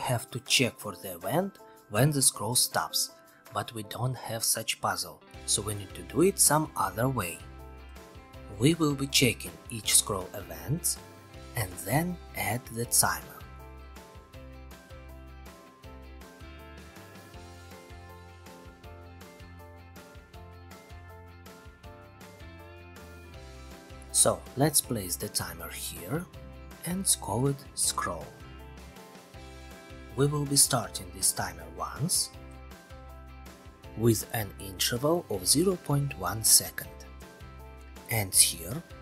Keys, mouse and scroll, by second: 23.1 click, 27.3 click, 27.5-29.4 typing, 30.9 click, 31.2 1, 31.8 click, 32.7 click, 33.1-34.2 typing, 34.7 Return, 36.7-37.8 middle drag, 38.9-39.0 middle drag.